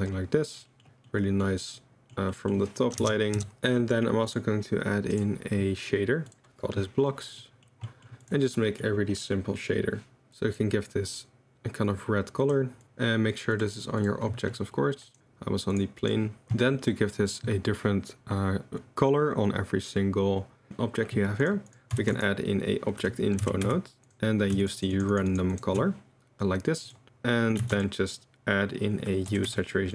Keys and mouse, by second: 1.0-1.4 middle drag, 1.7-2.5 middle drag, 3.0 KP_0, 3.0 KP_Decimal, 3.3 KP_0, 4.7-6.3 drag, 7.4 click, 7.8 drag, 8.2 click, 13.5 drag, 15.1 click, 15.2 middle drag, 15.7 click, 16.1 middle drag, 21.4 click, 21.7 click, 22.2 shift+a, 24.1-24.5 drag, 24.6 ctrl+shift+click, 25.1 ctrl+shift+click, 25.5 ctrl+shift+click, 27.8 shift+a.